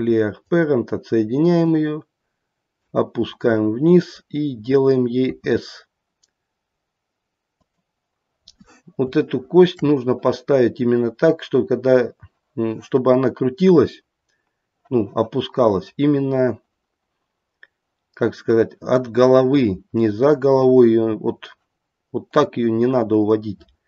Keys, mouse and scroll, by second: 1.7 click, 3.2-4.6 scroll up 1, 4.6-5.2 scroll up 2, 5.2 s, 8.4-8.9 scroll up 2, 9.2 shift+middle click, 22.3 click.